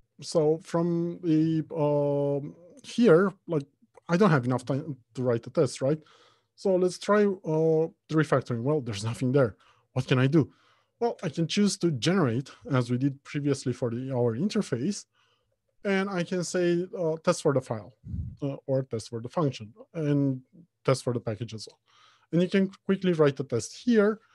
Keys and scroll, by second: 7.6 ctrl+alt+shift+t, 11.5 alt+Insert.